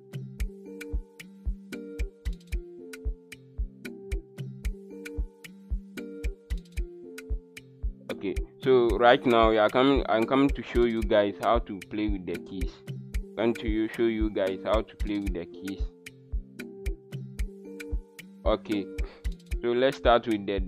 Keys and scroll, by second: 20.4 w.